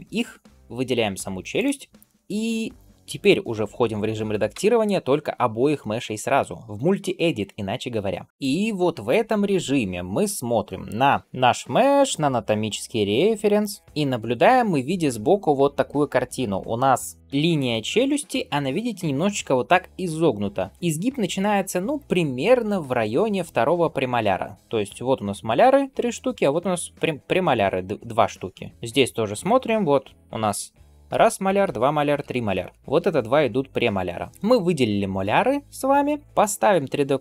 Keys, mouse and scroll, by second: 1.4 shift+click, 4.4 Tab, 8.3 shift+middle click.